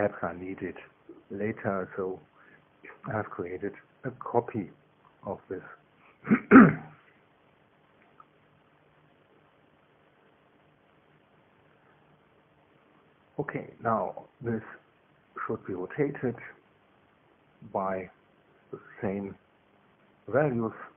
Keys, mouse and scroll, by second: 2.9 KP_2, 3.4 KP_1, 4.4 KP_1, 4.8 KP_2.